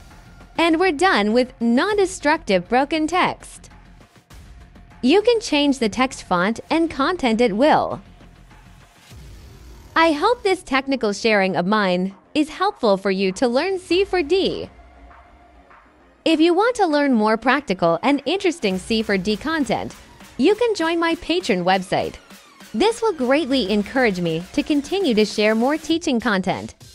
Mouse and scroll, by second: 0.0 right click, 0.1 click, 0.6 click, 0.8 click, 1.0 click, 1.3 right click, 1.4 click, 1.8 middle click, 2.1 click, 2.3 click, 2.5 click, 2.8 click, 3.7 click, 6.0 click, 7.0 click, 7.4 middle click, 7.7 right click, 7.9 click, 8.8 click, 9.1 click, 9.8 click, 9.9 click, 10.7 click, 11.6 click, 12.8 click, 13.0 click, 13.4 right click, 13.6 click, 14.2 right click, 14.5 click, 14.9 click, 15.5 click, 15.9 click, 16.7 click, 17.3 click, 17.6-19.2 drag, 19.7 click, 21.2 click, 21.4 click, 21.5 right click, 21.6 click, 22.3 click, 22.7 click, 22.8 right click, 22.9 click, 23.1 click, 23.9 click, 24.4 click, 24.6 middle click, 24.8 click, 25.8 click, 25.9 right click, 26.0 click, 26.3 click, 26.5 middle click, 26.7 click.